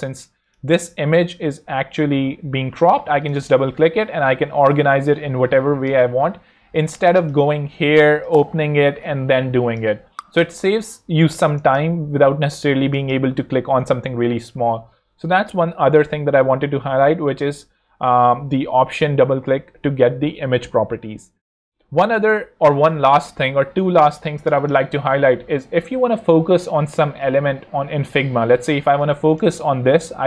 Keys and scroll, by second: 6.2 super+z, 10.0 super+z.